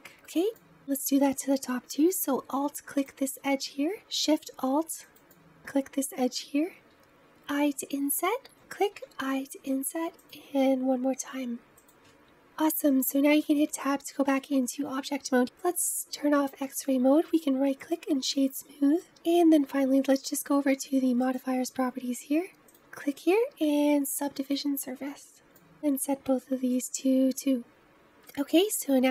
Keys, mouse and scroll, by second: 0.1-3.1 middle drag, 3.1 alt+click, 6.7 i, 8.8 i, 10.5 i, 12.1-12.9 scroll down 1, 12.9 Tab, 13.4-15.6 middle drag, 15.6-17.9 drag, 17.9-19.0 right drag, 19.0 middle click, 24.6-28.0 drag, 28.0-29.1 middle drag.